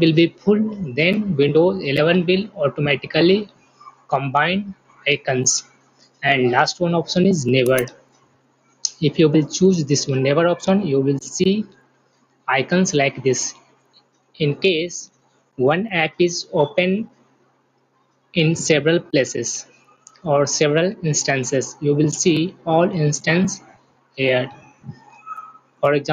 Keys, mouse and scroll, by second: 7.4 click.